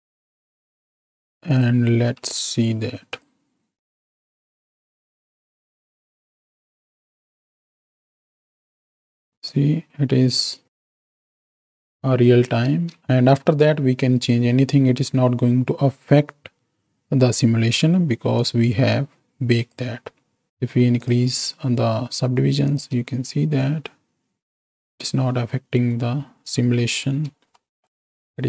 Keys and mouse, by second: 0.8 click, 3.0-5.9 drag, 6.2-7.9 drag, 8.6 click, 9.0 x, 9.4-11.3 drag, 11.6 space, 12.7 space, 13.0 middle click, 18.4-20.0 drag, 21.0 click, 22.6 click, 23.0 space, 27.1 space, 27.6 click, 28.3 space.